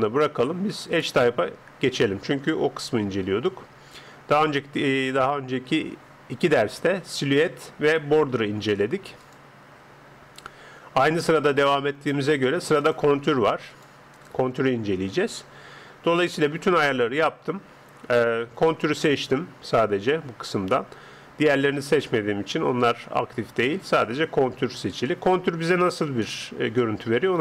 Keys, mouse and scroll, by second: 0.9 click, 3.4 click, 9.2 click, 12.8-16.1 drag.